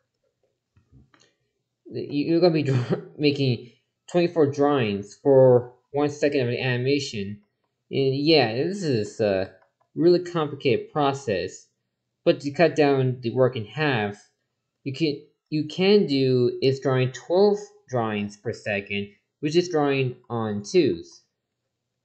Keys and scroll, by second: 2.1 ctrl+z, 4.7 ctrl+z, 6.4 ctrl+z, 9.0 ctrl+z, 20.2 ctrl+z.